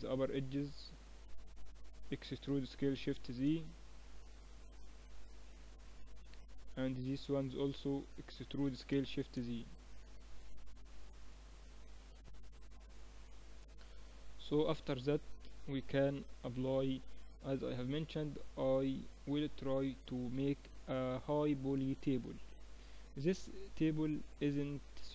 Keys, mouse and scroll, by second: 0.2 a, 1.2-2.3 middle drag, 2.3 e, 6.6 a, 7.4-9.3 right drag, 8.3 e, 10.9 middle click, 13.7 Tab, 19.0-22.2 middle drag, 22.2-22.9 scroll up 1, 23.6-25.1 middle drag.